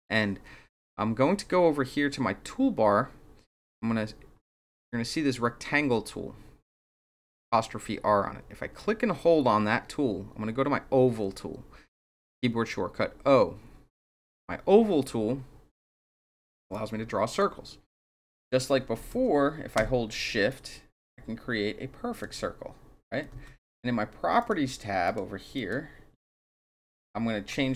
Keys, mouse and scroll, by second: 8.7-14.0 drag, 16.7 click, 18.9 ctrl+z, 20.4-22.2 shift+drag, 23.3 ctrl+z, 24.3 click, 25.0 click, 25.5 click.